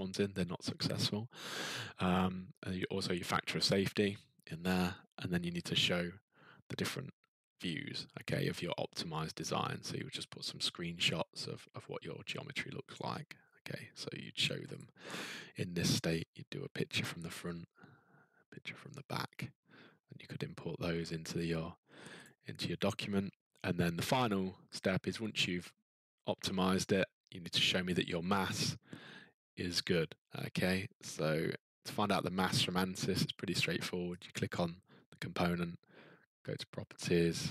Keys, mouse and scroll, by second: 4.5 scroll down 6, 12.9 click, 14.8 click, 15.6-16.1 scroll, 17.2 middle click, 19.2 middle click, 19.7 scroll, 22.2 click, 23.0-23.7 scroll, 28.5 click, 34.2 click.